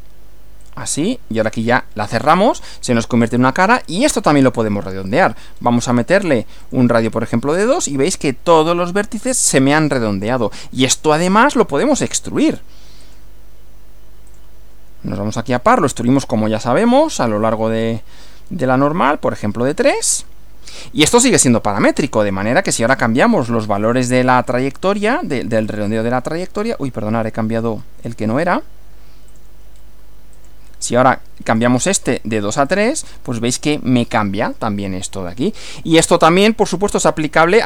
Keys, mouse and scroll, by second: 0.6 click, 1.7 click, 3.0-3.9 middle drag, 5.1 click, 5.5-6.1 scroll up 2, 6.7 click, 10.0-11.1 middle drag, 12.1 click, 13.1 click, 14.3 click, 15.4 click, 17.1 click, 17.5-18.1 scroll up 4, 19.9 click, 22.6 click, 23.9 click, 24.3 scroll up 2, 25.7 click, 27.6-28.0 scroll down 2, 29.3 click, 29.7 scroll down 2, 30.3 click, 31.5 click, 32.0 scroll up 1, 32.7 click, 35.1-36.2 middle drag, 36.2-36.5 scroll down 1, 36.7-37.6 middle drag.